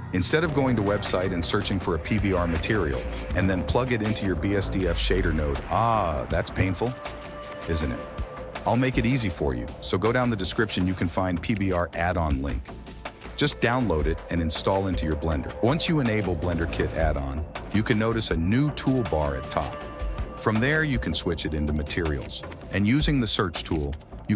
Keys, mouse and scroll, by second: 1.6 right click, 19.6 n, 21.9 click, 23.1-24.3 drag.